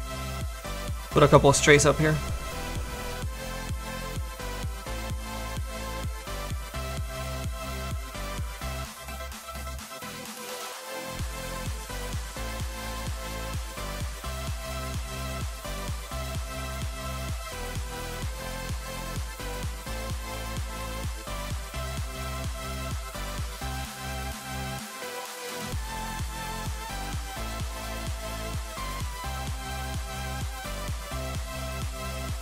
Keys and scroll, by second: 6.6 s, 26.4 s, 30.5 s.